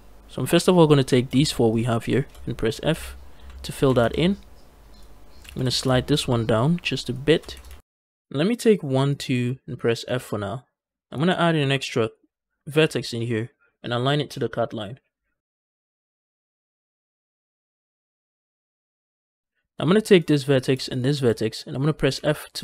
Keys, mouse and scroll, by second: 0.8 click, 1.3 shift+click, 1.6 shift+click, 1.9 shift+click, 2.8 f, 3.3 a, 3.7 a, 3.9 a, 4.8 click, 5.3 g, 5.4 g, 6.9 shift+click, 7.4 a, 7.5 a, 7.8 shift+middle click, 8.5 click, 8.9 shift+click, 9.9 f, 11.4 ctrl+r, 15.4 click, 15.7 scroll down 2, 15.7 shift+middle click, 15.9 shift+middle click, 16.0 scroll up 2, 16.2-17.6 typing, 16.9 shift+click, 17.3 shift+click, 17.7 shift+click, 18.2 scroll down 2, 18.3 shift+middle click, 18.4 scroll up 3, 18.8 scroll down 2, 18.9 scroll up 1, 20.0 click, 20.8 shift+click, 22.0 f.